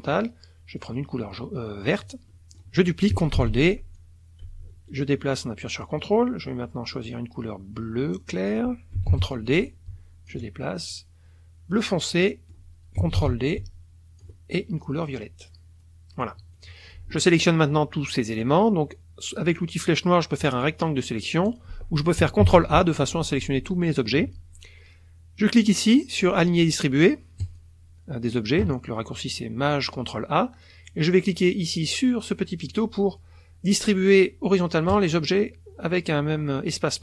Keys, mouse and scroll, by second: 0.8-2.2 drag, 2.3 click, 3.3 ctrl+d, 4.0-6.0 drag, 7.0-8.5 drag, 9.1 ctrl+d, 9.7 ctrl+click, 10.9-12.0 ctrl+drag, 12.1 click, 13.1 ctrl+d, 13.6 ctrl+click, 15.0-16.4 drag, 16.5 click, 20.4-21.8 drag, 22.4 ctrl+a, 27.4 click, 34.9 click.